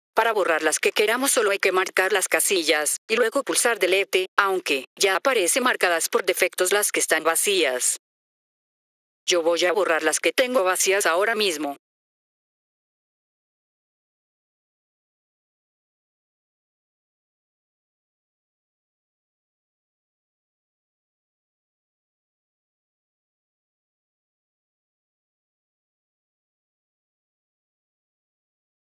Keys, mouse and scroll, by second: 0.1 click, 3.5 click, 12.9 click, 15.3 click, 21.7 click, 27.5 F3.